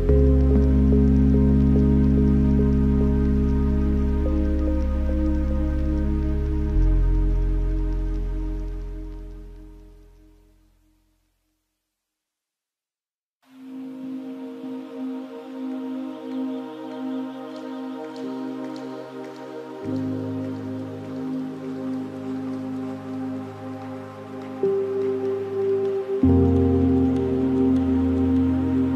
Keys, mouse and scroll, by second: 0.6-1.8 middle drag, 1.8-2.2 scroll up 3, 2.2-3.2 middle drag, 3.2 click, 4.8 drag, 5.6 g, 7.5-8.0 middle drag, 8.0-8.3 scroll up 3, 8.5 shift+a, 12.7 click, 14.6 middle click, 15.3 shift+a, 18.3-21.4 drag, 22.2 click, 24.5-25.1 middle drag, 25.1 shift+a, 27.8-28.9 middle drag.